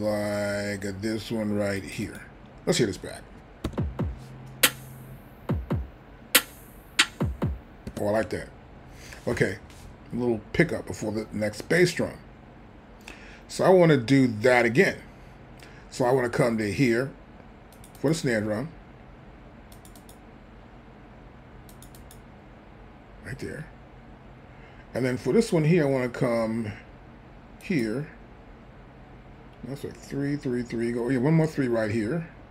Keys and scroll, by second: 3.7 space, 7.9 space.